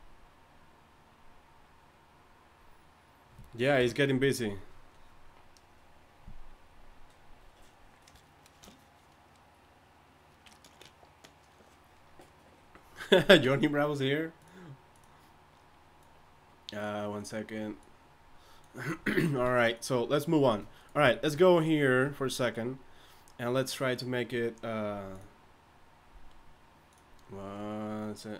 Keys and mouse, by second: 3.8 KP_1.